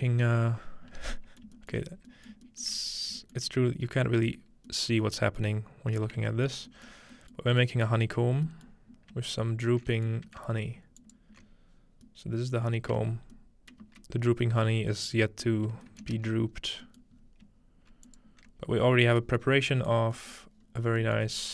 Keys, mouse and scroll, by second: 1.4 shift+middle click, 1.7 shift+middle click, 1.8-2.9 shift+scroll down 2, 2.3 shift+middle click, 2.7 shift+middle click, 3.4-4.7 shift+middle drag, 6.2 shift+middle click, 6.5 shift+middle click, 7.4 shift+middle click, 8.0-9.9 scroll down 1, 8.5 middle click, 10.0 alt+shift+middle click, 11.0-12.7 alt+shift+drag, 11.9-13.1 scroll down 1, 13.0 shift+middle click, 13.1 scroll up 1, 13.7 shift+middle click, 13.8 shift+z, 14.8-15.2 scroll down 1, 15.6 middle click, 15.7 scroll down 1, 16.0-16.5 ctrl+middle drag, 16.1 ctrl+space, 16.5 scroll up 2, 17.2-18.1 scroll up 2, 18.1-18.7 alt+shift+drag, 18.7-19.1 scroll down 1, 19.2 middle click, 19.4 scroll up 1, 19.6 scroll down 1, 20.5 typing, 20.6 scroll up 1, 21.3 scroll up 1.